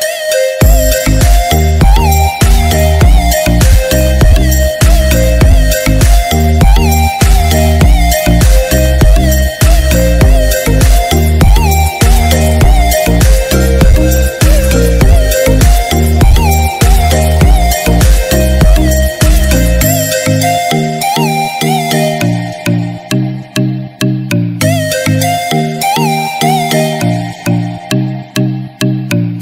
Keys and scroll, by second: 1.6 ctrl+-.